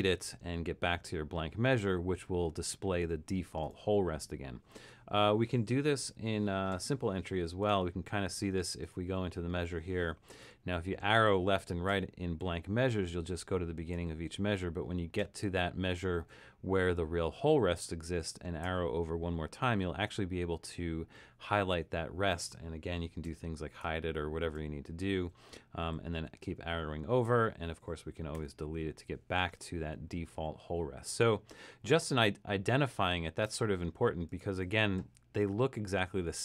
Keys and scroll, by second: 6.1 7, 10.4 Left, 10.9 Left, 11.4 Right, 11.9 Right, 12.4 Left, 12.9 Left, 13.4 Right, 14.0 Right, 15.2 Right, 18.7 Right, 23.3-23.8 typing, 24.6 Right, 25.2 Right, 25.8 Right, 26.2 Left, 26.5 Left, 27.2 Left, 28.4 BackSpace, 29.8 Right, 30.4 Left.